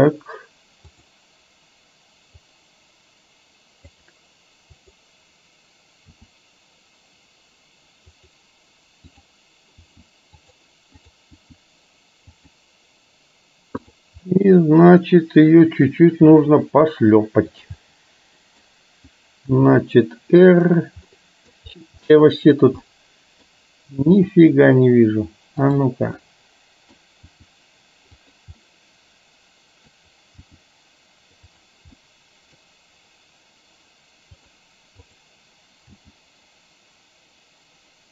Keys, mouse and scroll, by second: 1.1 click, 2.5-4.0 drag, 4.8 click, 6.2 r, 9.2 click, 9.8 r, 11.0 click, 11.5 r, 14.3-16.0 middle drag, 16.3 g, 17.8-18.7 middle drag, 19.6 r, 21.1 middle click, 22.1 middle click, 23.0 middle click, 24.1 r, 26.3-27.0 middle drag, 27.3 r, 28.7-30.2 middle drag, 30.5 g, 32.1-32.6 middle drag, 34.5 click, 35.1 click, 36.0 g.